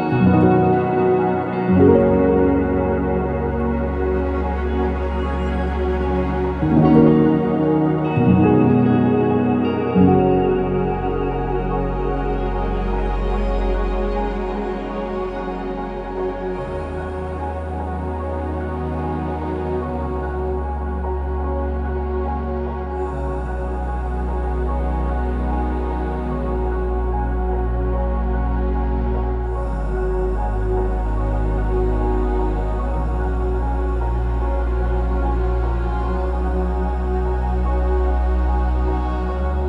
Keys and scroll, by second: 0.3-1.5 typing, 0.4 Return, 1.7 Return, 5.7 BackSpace, 7.6 typing, 7.6 Return, 8.6 Escape, 8.6 Escape, 12.6-13.7 typing, 17.9-18.8 typing, 20.4 ctrl+z, 22.8 BackSpace, 23.3 BackSpace, 24.5 ctrl+c, 24.5 ctrl+v, 27.2-27.9 typing, 31.9-33.2 typing, 31.9 Return, 34.9 Escape, 36.6-38.6 typing, 39.4 ctrl+z.